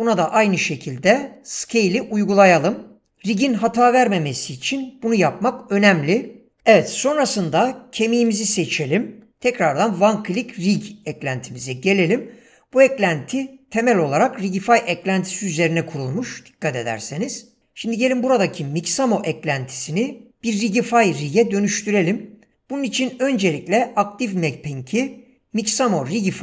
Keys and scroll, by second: 6.6 ,.